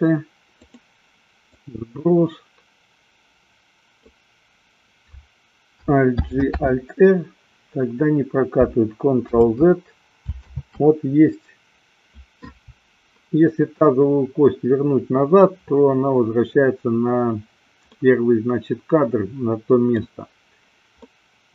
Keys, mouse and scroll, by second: 1.7-4.4 drag, 6.4 alt+g, 6.9 alt+r, 9.8 ctrl+z, 11.4 ctrl+z, 18.2-20.3 middle drag, 21.4-21.5 middle drag.